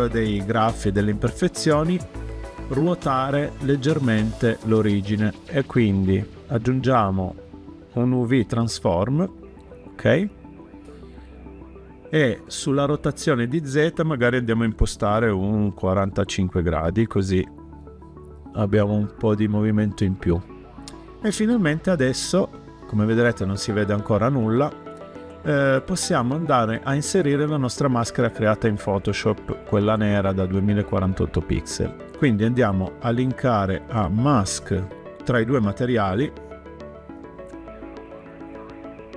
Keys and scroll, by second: 15.6-16.4 typing, 16.8 Return.